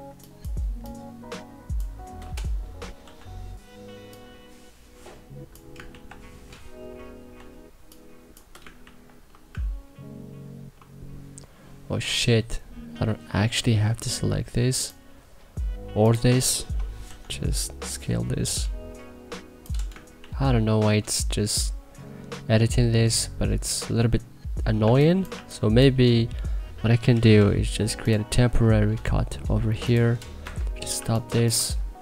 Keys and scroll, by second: 2.8 t, 5.6 ctrl+z, 7.1 e, 8.5 ctrl+z, 16.8 t, 19.9 ctrl+z, 24.6 1, 25.0 2, 26.8 k, 30.1 Escape, 30.7 2, 31.0 1, 31.8 e.